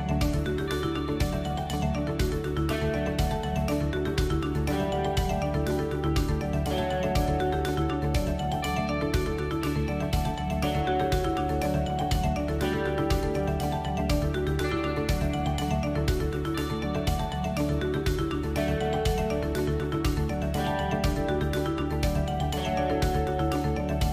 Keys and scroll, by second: 0.9 g, 2.8 Tab, 3.3 g, 6.3 shift+a, 7.4 s, 8.3 s, 11.3 KP_7, 11.8 g, 21.1 Tab, 22.2 KP_1.